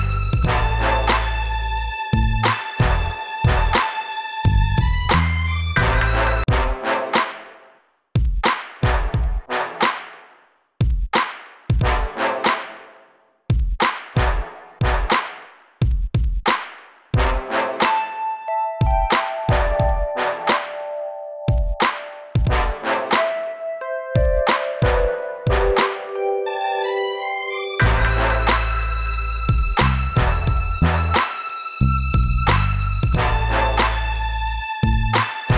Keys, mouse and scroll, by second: 0.4 scroll up 1, 1.4 click, 3.1 click, 3.6 click, 3.7 click, 5.9 shift+Return, 6.1 shift+Return, 6.4 shift+Return, 7.8 click, 9.4 Delete, 10.3 click, 11.4 click, 20.6 click, 20.8 click, 22.0 click, 25.0 scroll up 2, 27.0 click, 28.4 click, 29.1 click, 29.2 click, 29.7 click, 31.0 click, 32.3 click.